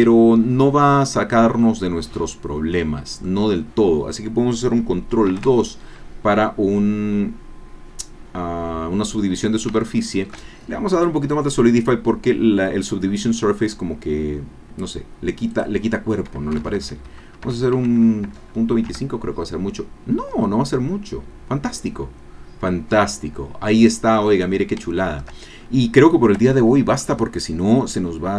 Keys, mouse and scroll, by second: 3.4 middle click, 3.5-3.8 scroll up 2, 3.8 middle click, 4.8 ctrl+middle click, 5.3 ctrl+2, 6.0 scroll down 1, 6.3-9.4 drag, 9.5 scroll up 1, 9.8 shift+click, 12.6-13.8 drag, 15.5 click, 16.6 BackSpace, 17.4 Delete, 18.3 KP_2, 18.8 KP_Enter, 20.4 scroll down 2, 20.7-24.3 drag, 24.4-24.8 scroll down 2, 24.9 shift+middle click, 25.5-25.9 shift+scroll up 3, 25.9 scroll down 2, 26.5-28.3 shift+drag.